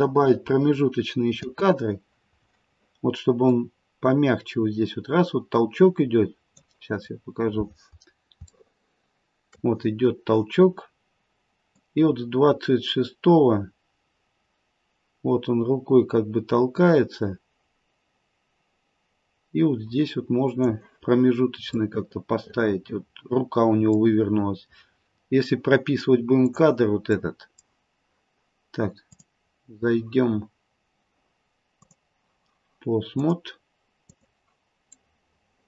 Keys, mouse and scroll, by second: 1.4 space, 3.5 click, 7.0-8.1 scroll up 1, 8.6 shift+middle click, 8.6-9.4 scroll up 4, 10.1-11.0 scroll down 1, 21.8 middle click, 25.0-26.4 scroll up 1, 26.4 click, 26.4-27.1 scroll up 2, 27.1 middle click, 29.1 click, 31.8 click, 34.8 middle click, 34.9 middle click.